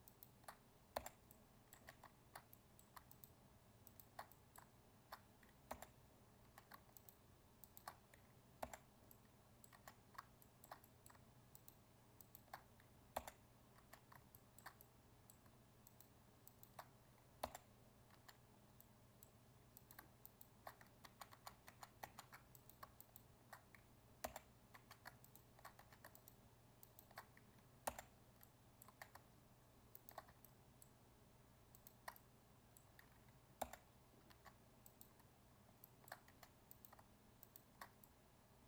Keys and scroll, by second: 21.0 ctrl+z.